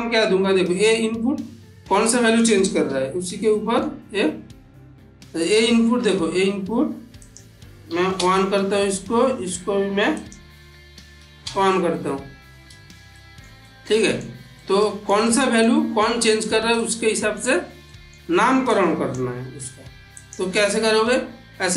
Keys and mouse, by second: 1.8-2.4 middle click, 2.7 n, 3.3-3.9 middle drag, 7.0 click, 10.1 click, 12.9 click, 13.0 shift+middle click, 13.5-14.1 middle click, 14.5-15.0 shift+middle click, 16.9 middle click, 18.2 middle click, 18.7-19.1 click, 19.5 g, 20.0 click, 21.6-21.7 drag.